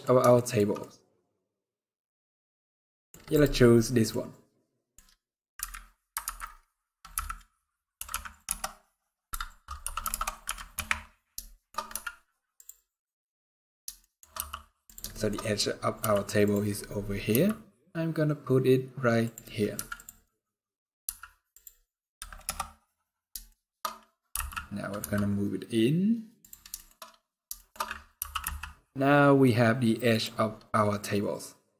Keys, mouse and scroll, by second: 0.0 shift+middle click, 0.5 middle click, 2.6 middle click, 3.3-3.7 scroll down 3, 3.5 middle click, 4.0 scroll down 2, 4.3 scroll up 1, 4.3 middle click, 5.2 KP_3, 5.9 ctrl+KP_3, 6.8 KP_1, 7.6 r, 9.5 r, 11.2 shift+middle click, 11.4-12.8 scroll up 4, 11.6 z, 13.7 shift+middle click, 14.0 g, 14.8 shift+middle click, 15.0-15.4 scroll up 8, 15.7 g, 16.3-16.7 scroll up 5, 17.0 g, 19.2-19.9 scroll down 8, 19.4 z, 19.9 middle click, 20.5 scroll down 2, 20.7 z, 22.1 KP_0, 23.2 shift+middle click, 24.0 g, 26.4 shift+middle click, 26.6-27.5 shift+scroll up 7, 27.2 shift+middle click, 27.8 g, 30.1-31.0 scroll down 12, 31.0-31.7 scroll up 2.